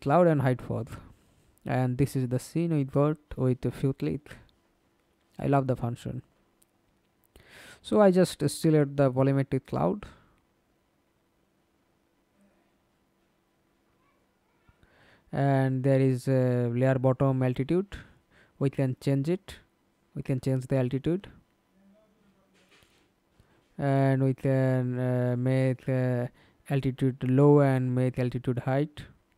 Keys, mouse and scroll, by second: 1.8-2.5 scroll up 2, 2.7 alt+click, 4.2 alt+right click, 6.0 alt+click, 9.2-13.5 scroll up 33, 13.5 scroll up 2, 13.5 scroll down 2, 13.8-14.4 scroll up 1, 14.4 scroll up 1, 14.4-17.5 scroll down 1, 18.8 middle click, 21.4 alt+right click, 22.8 alt+middle click.